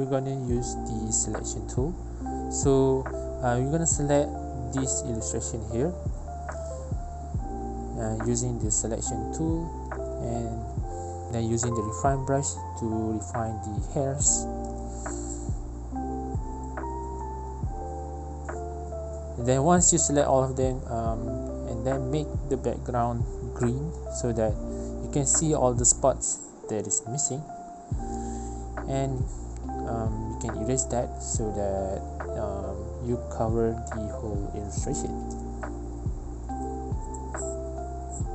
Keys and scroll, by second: 19.9 ctrl+z, 20.1 ctrl+z, 21.4 ctrl+j, 36.3 ctrl+alt+i, 37.8-38.3 typing.